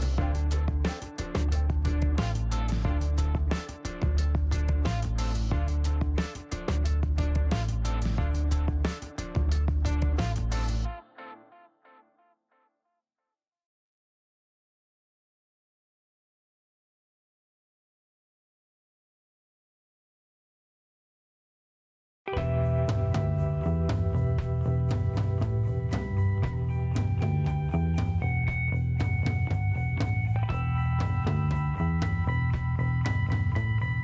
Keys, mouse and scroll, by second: 2.3 click, 4.4 shift+right click, 8.6 shift+scroll up 2, 9.0 middle click, 9.6 scroll up 2, 10.8 middle click, 13.0 click, 15.2 click, 16.5 shift+right click, 18.0-19.4 shift+middle drag, 22.1 click, 23.3 click, 24.5 space, 26.5 scroll down 2, 27.2 click, 28.1 click, 29.5 shift+right click, 30.6 middle click, 31.1 scroll up 1, 32.0 middle click, 32.7 scroll up 1.